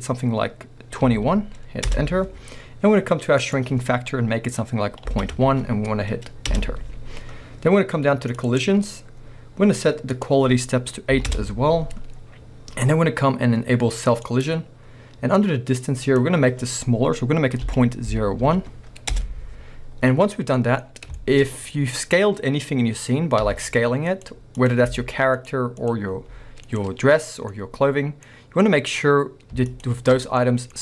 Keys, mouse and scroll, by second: 1.9 Return, 6.6 Return, 8.7-10.2 scroll down 2, 11.4 Return, 16.1-20.6 drag, 19.2 Return, 20.3 scroll down 2, 20.6-24.3 middle drag, 20.9 scroll up 2, 22.1 scroll up 2, 22.4-23.5 scroll down 2, 23.5 s, 24.3 right click, 24.6 click, 25.0 s, 25.6 right click, 25.8 click, 26.2 s, 26.8 right click, 26.9 scroll up 1, 27.5-29.7 middle drag, 28.3-29.7 scroll up 2, 29.7 shift+click, 30.4 middle click.